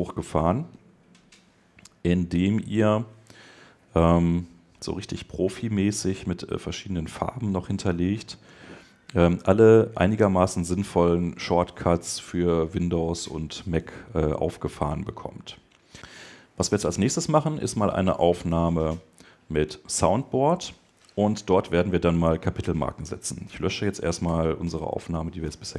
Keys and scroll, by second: 24.2 super+BackSpace, 24.7 BackSpace.